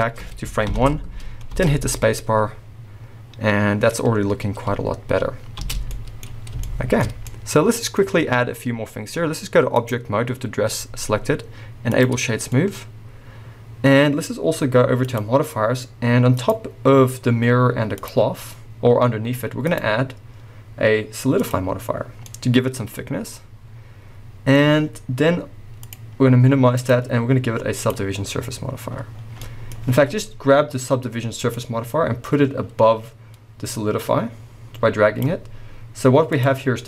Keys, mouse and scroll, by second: 0.8 shift+Left, 1.2-1.5 scroll down 1, 1.5 space, 5.8 space, 6.2-6.6 scroll up 2, 8.2-9.8 scroll down 2, 9.8-12.5 drag, 12.5-15.0 middle drag, 15.0 click, 16.3-22.2 drag, 22.2-25.8 middle drag, 24.6-25.8 scroll up 2, 25.8-29.4 drag, 29.1 scroll down 2, 29.4-31.5 middle drag, 29.8-31.5 scroll up 2, 31.5-35.2 drag, 36.3-36.8 drag.